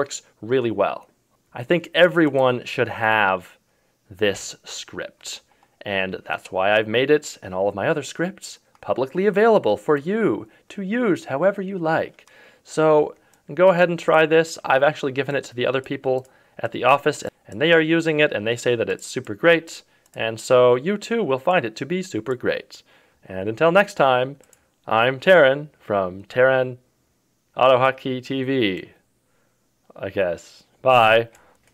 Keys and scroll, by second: 4.3 ctrl+KP_6.